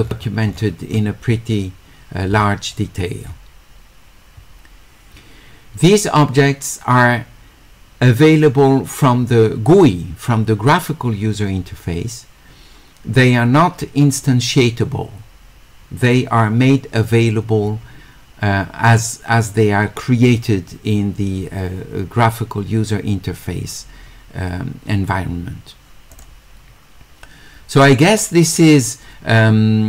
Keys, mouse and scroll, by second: 0.2 middle click, 26.1 click, 28.5-29.8 drag.